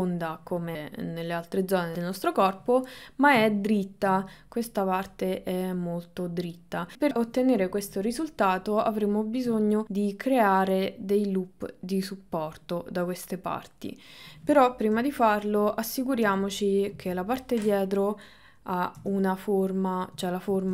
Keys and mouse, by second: 3.6 ctrl+middle click, 8.1 click, 9.0 ctrl+middle click, 15.0 KP_3, 15.8 middle click, 16.2 KP_3, 16.9 KP_1, 19.0 KP_9, 20.3 shift+middle click.